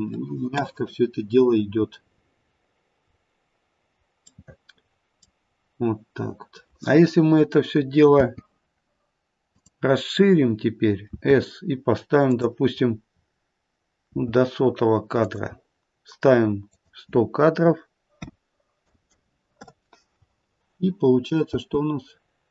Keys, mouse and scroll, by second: 3.0-3.7 scroll up 2, 3.7-4.5 scroll down 1, 4.5 middle click, 5.4-6.7 scroll down 2, 8.1 space, 9.5 click, 11.1 s, 12.8-14.1 scroll down 5, 14.1-16.3 scroll down 3, 14.1 s, 16.7 click, 19.0 KP_0, 21.5 space, 22.0-22.5 scroll down 2.